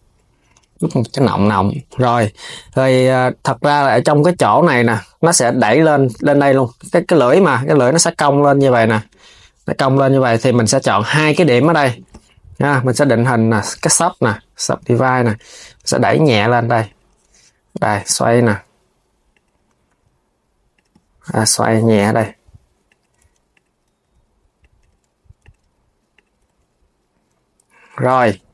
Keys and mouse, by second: 0.7 KP_3, 1.4 Tab, 1.6 click, 2.6 Tab, 3.7 click, 5.1 KP_3, 9.8 click, 11.0 shift+click, 13.5-14.6 right drag, 14.6 click, 15.3 g, 21.2 click, 21.5 r, 23.2 click, 23.7 r, 25.1 click, 25.8 click, 26.1 g, 28.4 g.